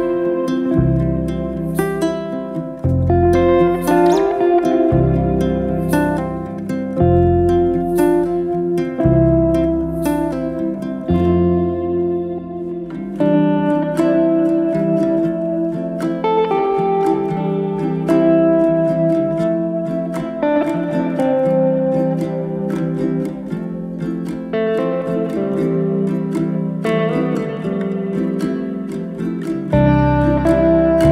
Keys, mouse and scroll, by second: 0.0 g, 0.9-1.7 middle drag, 1.7 click, 2.3 click, 2.5 scroll up 2, 2.7-3.4 shift+middle drag, 3.4 g, 4.8 click, 5.2 g, 6.0 middle click, 6.6 scroll down 2, 6.8 click, 7.0-7.6 middle drag, 7.6 scroll up 1, 7.7-8.2 scroll down 1, 8.2-9.7 middle drag, 12.7-13.6 shift+middle drag, 13.6 shift+s, 14.7 shift+a, 15.7 s, 16.3 s, 17.5-17.8 scroll down 1, 17.8-18.6 middle drag, 18.6-19.2 scroll up 1, 19.2-21.3 shift+middle drag, 21.3 click, 22.7 KP_7, 23.4-24.5 middle drag, 24.5 shift+right click, 25.0 shift+a, 27.2 g, 28.6 Tab, 29.6 click, 30.5 click.